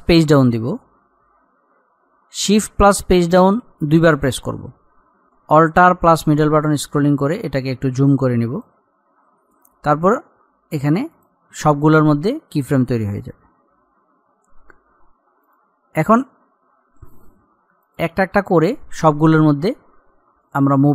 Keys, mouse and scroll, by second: 0.3 shift+Page_Down, 4.5 shift+Page_Down, 6.3-7.0 alt+scroll up 1, 7.5 click, 13.0-13.4 scroll down 1, 15.7 click.